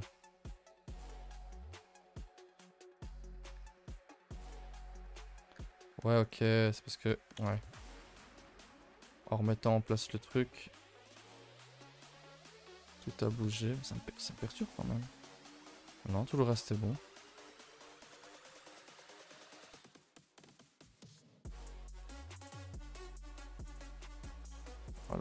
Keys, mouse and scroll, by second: 3.4 click, 5.4 click, 6.9 click, 7.3 click, 7.9 click, 9.4 click, 9.9 click, 11.5 click, 13.4 KP_0, 13.8 KP_0, 14.6 scroll down 7, 14.8-16.5 shift+middle drag, 16.5-16.9 scroll up 4, 16.9-18.4 middle drag, 18.4 click, 19.1 click, 20.9 click, 22.1 click, 22.9 click.